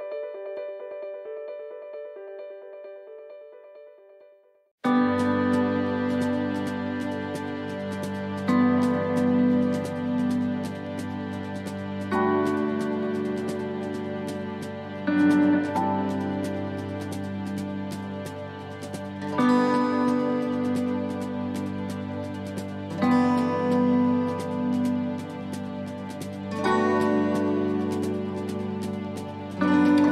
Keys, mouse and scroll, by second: 0.5 s, 2.1 click, 2.9 shift+scroll up 1, 3.0 shift+middle click, 4.1 click, 5.9 click, 7.5 s, 8.9 middle click, 9.4 shift+middle click, 9.8 scroll up 3, 10.1 middle click, 10.6 shift+middle click, 11.1 middle click, 12.1 click, 13.1 middle click, 13.6 scroll up 2, 14.0 middle click, 15.1 click, 16.1 scroll down 2, 16.7 scroll down 1, 17.1 click, 18.9 middle click, 20.4 shift+d, 21.5 click, 25.1 shift+middle click, 25.5-26.0 scroll up 2, 26.0 shift+middle click, 26.4 middle click, 26.9 scroll up 2, 27.3 middle click, 29.2 ctrl+r.